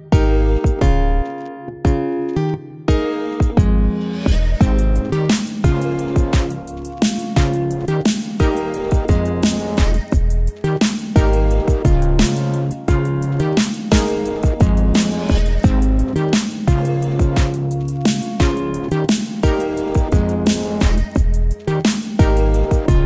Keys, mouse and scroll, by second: 1.0 click, 2.1-3.2 typing, 5.6-8.5 drag, 9.1 click, 9.8-11.4 typing, 15.3 click, 22.0 click.